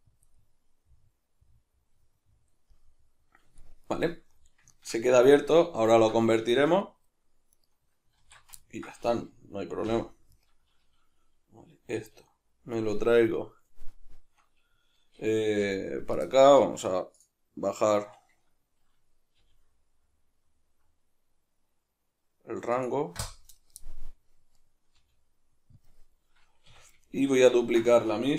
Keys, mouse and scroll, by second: 0.3 click, 0.3-7.5 middle drag, 7.5 right click, 8.2 alt+q, 8.6-10.3 ctrl+middle drag, 9.9 o, 10.3 right click, 12.0 g, 12.8 right click, 15.6 g, 17.2 click, 17.5-18.4 scroll up 1, 18.4-19.4 scroll down 1, 19.4 g, 22.8 click, 24.5 right click, 25.0 g, 25.9 click, 26.7 a, 27.1-28.3 shift+middle drag.